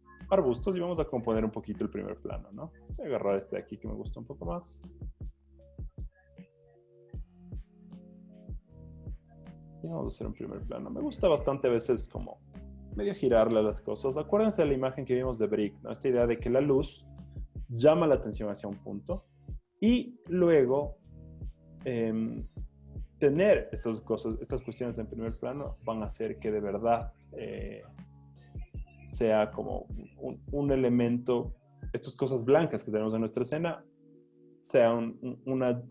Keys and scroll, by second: 3.4 v, 7.5 super+t.